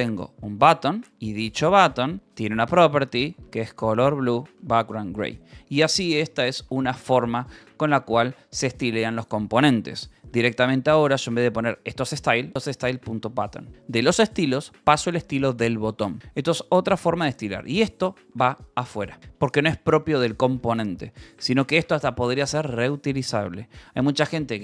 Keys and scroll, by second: 0.0-2.1 typing, 2.4 Return, 3.0 Escape, 3.2-8.1 typing, 9.3 Escape, 9.4 j, 10.2 e, 11.9-13.4 typing, 13.9 ctrl+s, 14.4-16.2 typing, 15.7 Escape, 17.2-20.0 typing, 18.1 Escape, 20.2 Escape, 21.0 ctrl+s, 21.2 k, 21.8 k, 22.6 k, 22.7 Escape, 24.4 j.